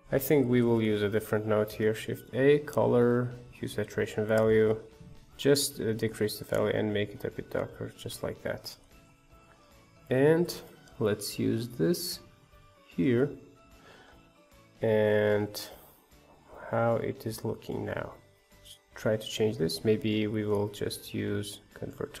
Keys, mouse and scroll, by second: 0.0 shift+click, 1.2 Delete, 3.6 shift+a, 4.6 click, 6.4-10.6 shift+drag, 11.2-11.7 scroll up 4, 11.7-13.1 drag, 14.5-22.2 middle drag.